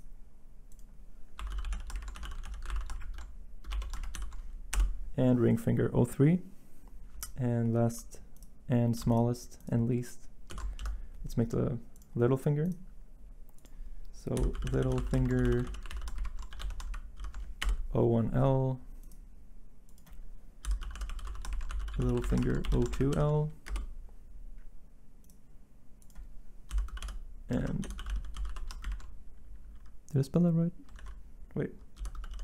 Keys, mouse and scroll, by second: 1.1-4.7 typing, 10.5-11.3 typing, 14.1-17.8 typing, 20.4-23.7 typing, 26.4-28.8 typing, 27.6 ctrl+a, 30.9 ctrl+a, 31.7-32.4 typing.